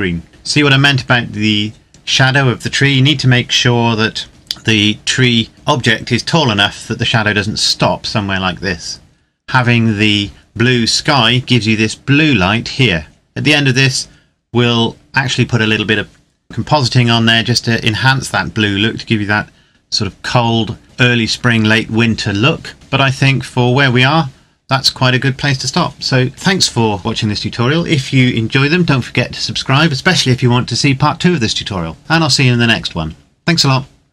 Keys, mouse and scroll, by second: 23.4-23.9 scroll up 1, 23.9-25.8 scroll down 1.